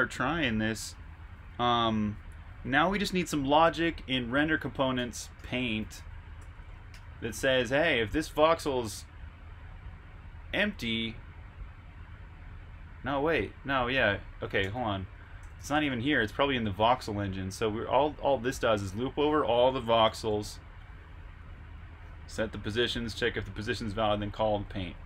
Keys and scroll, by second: 4.6-8.2 typing, 14.8-15.8 typing, 17.1-17.9 typing, 19.0-20.9 typing, 22.0 j.